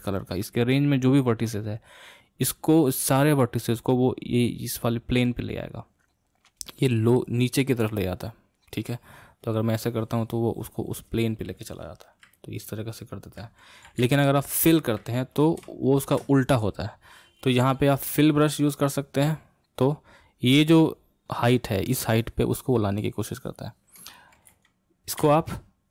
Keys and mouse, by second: 8.6-11.6 drag, 12.4-14.3 middle drag, 14.3 ctrl+z, 15.8-18.3 shift+middle drag, 18.3-24.8 drag, 24.8 ctrl+z, 25.5 ctrl+z.